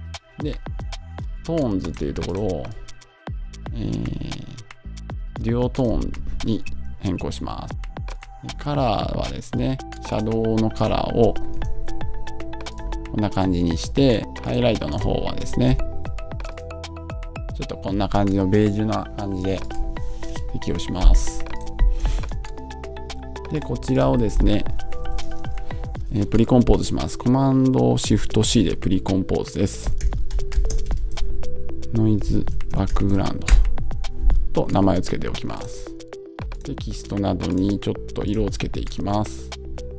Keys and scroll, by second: 30.8 Return, 33.3 shift+Return, 34.0 Return.